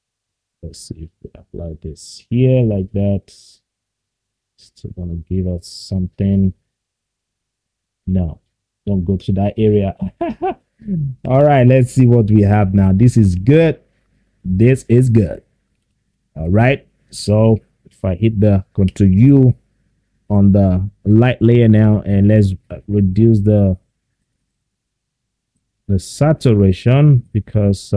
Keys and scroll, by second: 5.4 ctrl+z, 7.4 ctrl+z.